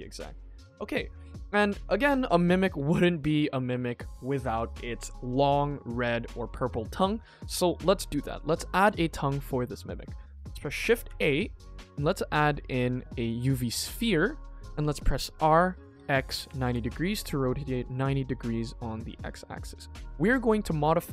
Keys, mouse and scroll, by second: 0.1 scroll down 2, 0.3 middle click, 0.6 ctrl+s, 0.8 middle click, 1.2 shift+middle click, 1.5 middle click, 1.9 scroll up 2, 2.3-3.6 middle drag, 7.2-7.5 scroll down 1, 7.5-8.0 scroll up 3, 8.0 middle drag, 8.5 shift+middle drag, 8.9 ctrl+s, 9.2 middle click, 9.6-10.6 scroll down 2, 11.0 shift+a, 13.7-14.1 middle drag, 15.3 r, 19.8-20.2 middle drag, 20.4-20.7 scroll up 2, 20.8 shift+middle click.